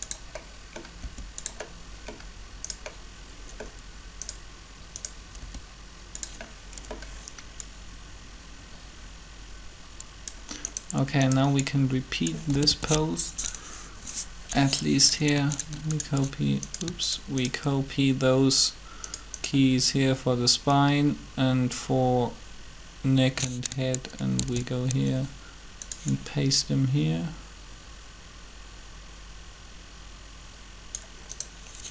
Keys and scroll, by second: 5.4 r, 12.5 typing, 24.4 shift+d.